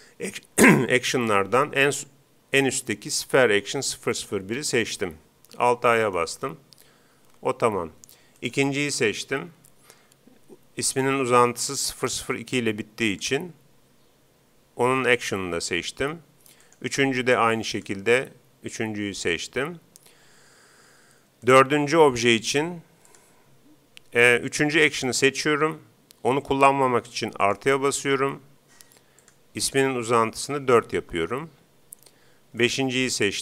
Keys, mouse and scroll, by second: 6.2 alt+a, 7.3 Escape, 8.4-10.1 right drag, 13.1-14.8 drag, 16.6-18.3 right drag, 17.7-19.4 drag, 21.5-23.3 right drag, 23.1-24.7 drag, 27.5-29.0 drag, 29.2-30.8 drag, 32.7-33.4 right drag.